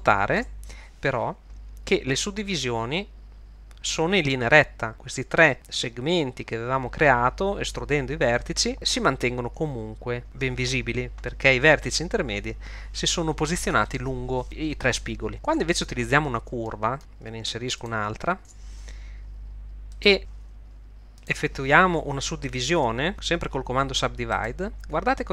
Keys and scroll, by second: 15.4 Tab, 16.5 shift+Tab, 17.0 shift+a, 18.4 Tab, 20.2 e, 22.8 a.